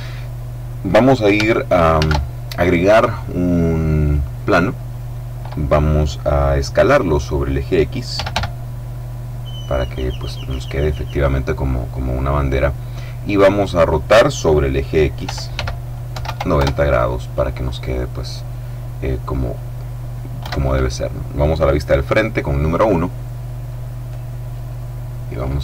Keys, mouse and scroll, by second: 2.0 shift+a, 4.1 click, 7.9-8.8 typing, 10.3 click, 15.2 r, 15.5 x, 16.0 KP_9, 16.2 KP_0, 16.5 KP_Enter, 20.4 KP_1, 24.0-25.6 drag.